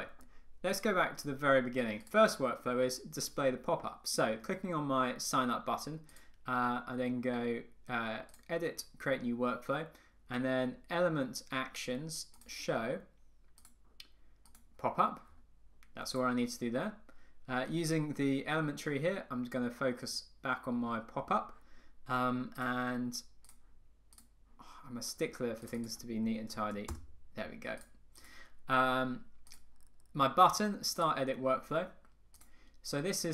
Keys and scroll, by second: 27.0 Return.